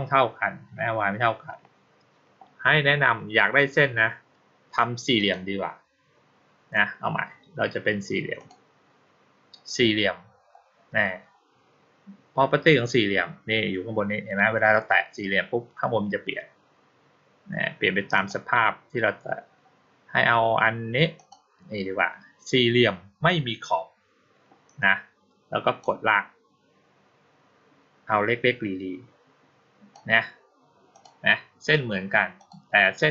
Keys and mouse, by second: 5.0 click, 8.2 click, 18.0 click, 21.0 click, 25.7-29.8 drag, 30.8 click, 32.2 click.